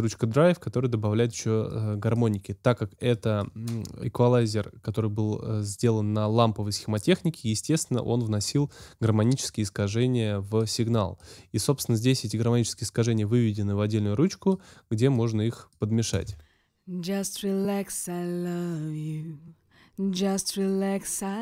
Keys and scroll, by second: 16.1 space.